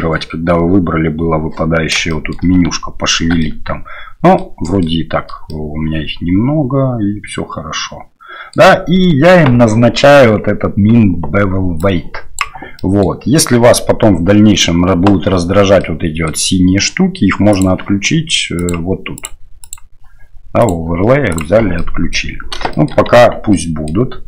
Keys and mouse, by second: 2.1 shift+middle click, 3.4-4.4 shift+middle drag, 4.6 shift+middle click, 5.5-8.5 middle drag, 11.9 click, 12.8 middle click, 15.8 middle click, 17.5-21.4 drag, 21.8 middle click, 22.7 shift+middle click, 23.2 Tab, 23.5 middle click.